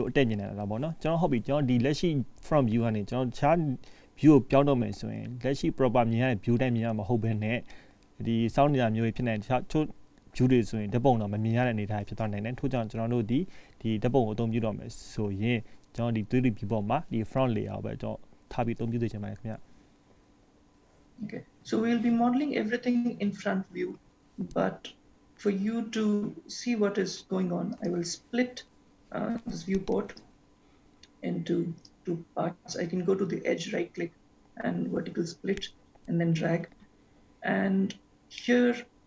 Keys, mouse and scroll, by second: 5.3-7.0 scroll up 1, 7.6 shift+middle click, 9.3 scroll up 2, 9.4 shift+middle click, 27.8 right click, 37.8-38.3 scroll down 4, 38.6 middle click.